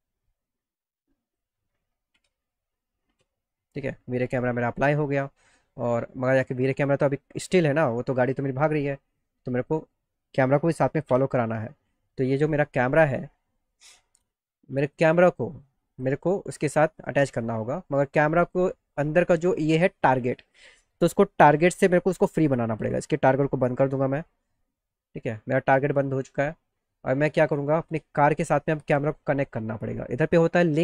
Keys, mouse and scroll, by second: 2.2 ctrl+c, 5.9 click, 7.1-9.8 drag, 13.2 click, 14.9 click, 15.3 click, 15.9 click, 16.5 middle click, 16.9 middle click, 18.5 click, 23.7 click, 28.1 click.